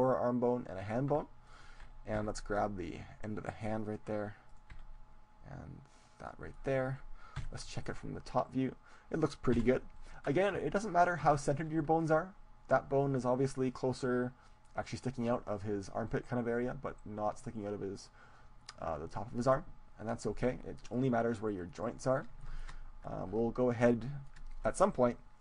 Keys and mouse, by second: 1.5-3.4 right drag, 2.3 g, 4.0-5.9 drag, 4.5-5.7 right drag, 5.0 g, 6.3-7.4 drag, 6.3 right click, 7.4 KP_7, 7.8 click, 8.2 middle click, 9.7 KP_1, 11.3-14.9 middle drag, 20.9-22.5 drag, 22.5-25.4 middle drag.